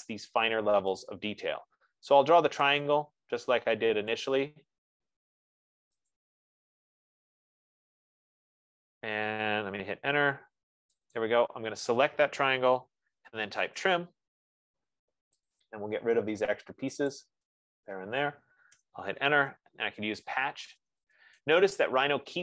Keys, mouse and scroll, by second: 0.2 click, 1.7 click, 3.3 click, 7.7 Return, 10.5 Return, 11.7 click, 13.3-14.3 typing, 16.0 click, 17.5 click, 19.1 Return, 20.2-22.4 typing.